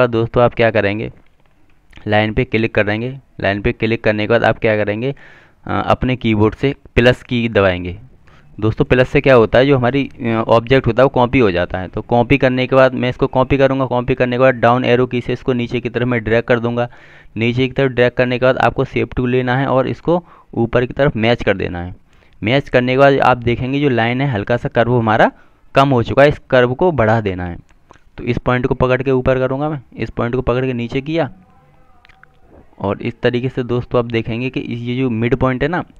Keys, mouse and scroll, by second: 0.3 click, 3.0 double click, 8.0 KP_Add, 11.9 Down, 17.4 click, 27.0 click.